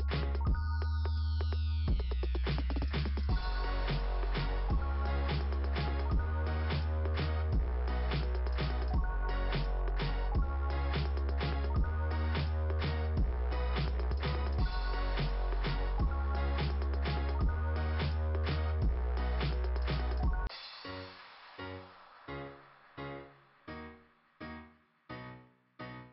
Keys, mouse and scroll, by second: 3.6 click, 3.9 click, 4.3 click, 9.0 click, 9.2 click, 9.5 click, 10.1 click, 10.2 click, 10.3 click, 10.6 click, 13.2 click, 13.7 click, 14.1 click, 14.3 click, 14.6 click, 14.9 click, 18.0 click, 19.7 click, 19.9 click.